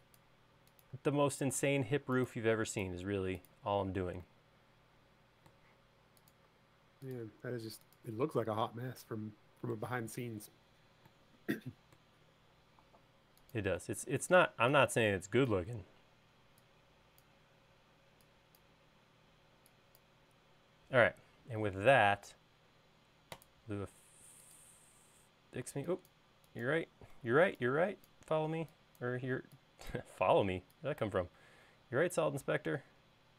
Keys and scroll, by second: 0.8 BackSpace, 1.3 BackSpace, 2.7 BackSpace, 3.3 BackSpace, 6.9 BackSpace, 14.9 e, 26.0 e, 27.6 Escape, 28.9 e, 33.0 space.